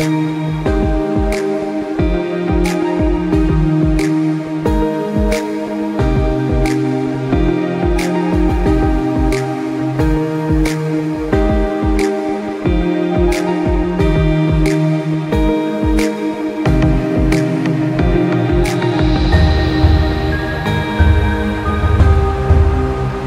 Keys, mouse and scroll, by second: 4.7 click, 8.4-8.9 scroll down 1, 9.5 click, 13.1 click, 16.7 click, 19.4 click.